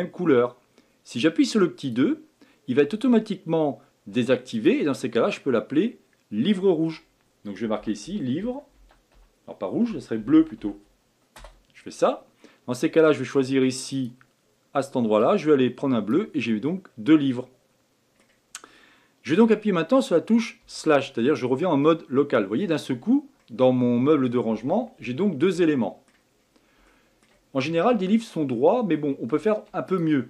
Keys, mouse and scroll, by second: 1.8-7.7 drag, 13.9 click, 16.7-19.8 middle drag, 20.6 KP_Divide, 21.4 scroll down 2, 21.8-26.4 middle drag, 26.4 scroll up 5, 26.9-29.9 shift+middle drag, 29.9 click.